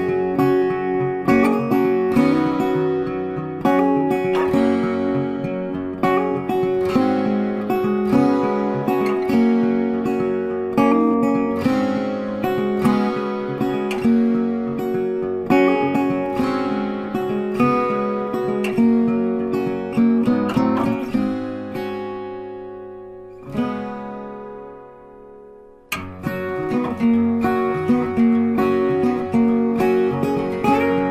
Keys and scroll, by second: 17.0 Up.